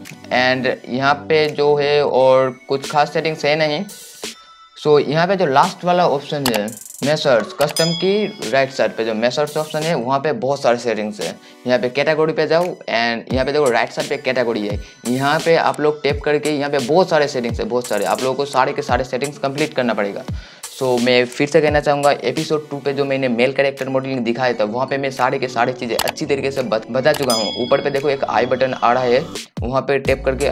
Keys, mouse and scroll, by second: 1.6 click, 8.5-10.9 drag, 14.7-20.9 drag.